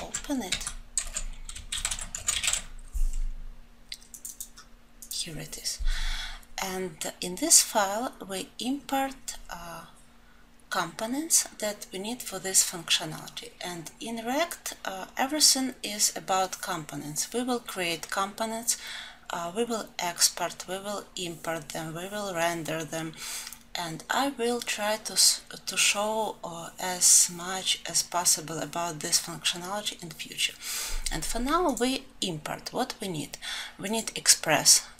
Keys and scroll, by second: 2.8 ctrl+shift+n.